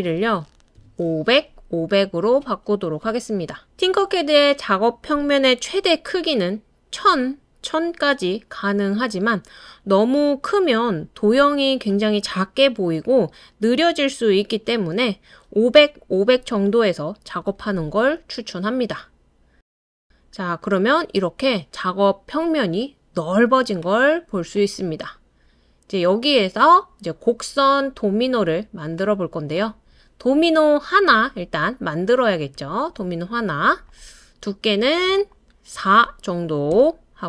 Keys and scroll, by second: 0.8 BackSpace, 1.0 5, 3.0 BackSpace, 3.4 5, 12.3-13.0 typing, 29.0 typing, 35.7 4, 36.7 Return.